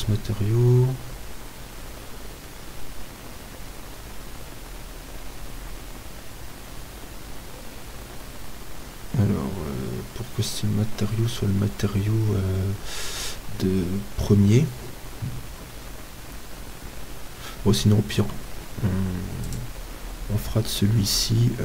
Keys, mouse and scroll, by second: 0.7 click, 0.7 right click, 18.2 Delete, 20.3-21.6 drag.